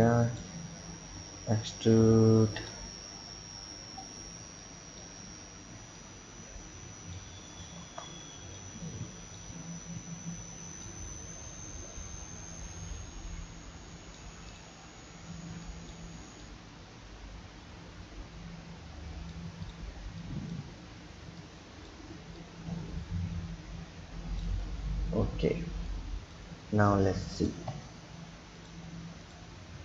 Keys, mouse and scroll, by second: 1.1 e, 2.6 e, 2.9-3.9 scroll down 2, 4.6-5.3 drag, 5.3-6.0 scroll up 1, 6.0 click, 7.7 ctrl+z, 8.5 click, 10.8 click, 14.5 drag, 15.3 b, 16.4 click, 19.7 drag, 19.9 b, 21.4 click, 22.4 click, 24.7-25.9 scroll down 2, 25.9-26.9 drag, 27.7 Tab, 28.6 click, 29.2 click.